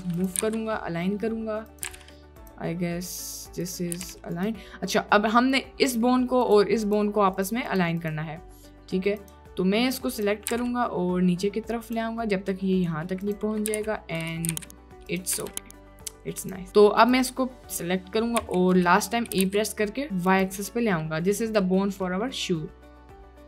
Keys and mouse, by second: 0.5 g, 2.0 g, 3.6 click, 4.0 g, 5.9 click, 6.9 click, 7.3 click, 7.7 click, 8.0 click, 9.3 click, 10.6 g, 13.2 click, 13.8 g, 14.5 g, 15.3 g, 18.5 e, 19.4 g, 20.8 drag, 21.4 click, 22.1 click, 22.8 click.